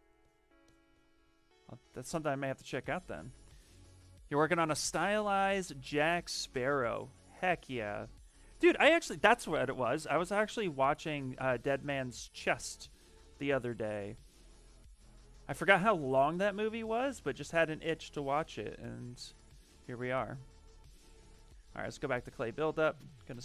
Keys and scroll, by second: 15.5 s, 21.0 b.